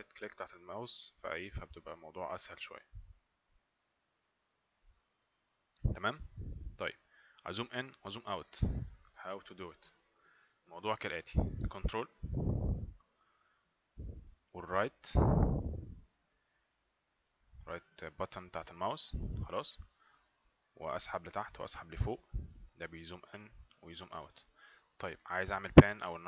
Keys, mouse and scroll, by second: 2.5 right click, 12.3 ctrl+right click.